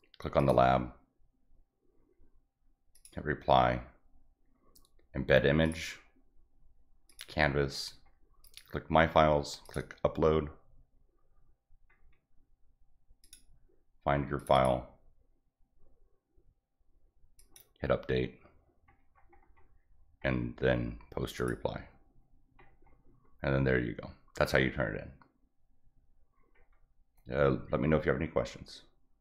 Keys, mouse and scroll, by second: 0.4 click, 2.9 click, 5.6 click, 7.1 click, 7.8 scroll up 2, 8.4 click, 9.6 click, 13.2 click, 14.4 click, 14.5 click, 17.4 click, 18.9 scroll up 1, 19.3 scroll down 1, 20.3 middle click, 21.4 click, 22.6 middle click, 22.7 middle click, 26.6 middle click.